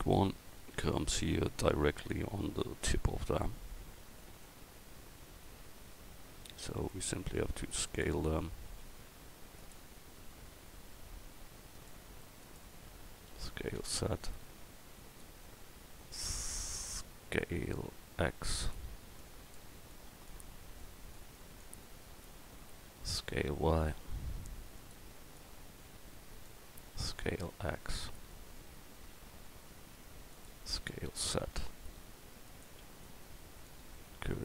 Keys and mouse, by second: 7.1 s, 8.8 s, 10.1 z, 13.3 s, 17.4 s, 19.2-21.9 drag, 22.3-24.8 middle drag, 23.1 s, 25.4-28.1 middle drag, 27.0 s, 28.7 s, 30.8 s, 33.0-34.0 drag.